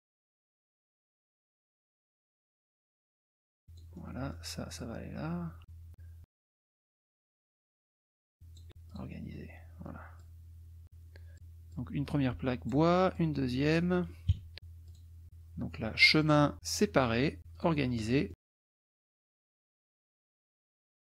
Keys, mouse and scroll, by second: 0.0 shift+click, 0.6 shift+middle click, 1.1 shift+click, 1.6 shift+click, 2.2 shift+click, 2.9 shift+click, 3.3-4.5 shift+drag, 4.8 click, 5.9 click, 6.7 KP_Subtract, 7.0 click, 8.0 shift+click, 8.9 click, 10.2 click, 11.7-12.9 drag, 13.1 click, 14.3 KP_Subtract, 14.8 click, 16.2 click, 16.8 click, 17.5 click, 18.3 click, 18.5 KP_Subtract, 19.3 click, 19.8 click, 20.7 click.